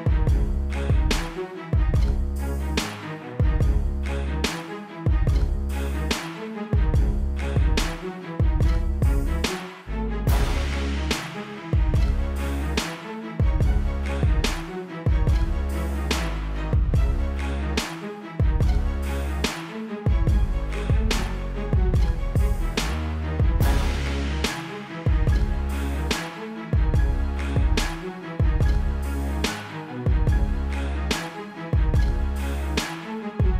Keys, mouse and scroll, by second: 0.0 click, 1.1 right click, 2.5 click, 3.8 right click, 5.1 click, 6.7 ctrl+=, 7.3 space, 7.3 click, 8.3 shift+click, 9.0 click, 9.4 =, 9.6 click, 10.1 click, 10.5 click, 11.7 click, 12.2 a, 12.4 click, 14.4-15.7 typing, 14.9 click, 17.6 typing, 18.0 click, 19.0 space, 19.1 click, 19.2 space, 19.4 a, 19.5 click, 20.6 -, 20.9 click, 21.4 shift+click, 21.9 click, 22.6 space, 22.7 click, 24.0 click, 24.5 Right, 24.6 Up, 24.8 Down, 24.9 click, 25.0 -, 25.2 space, 25.3 click, 30.0 KP_Subtract, 30.3 KP_4, 30.5 KP_5, 31.8 click, 32.8 KP_2, 32.9 Tab.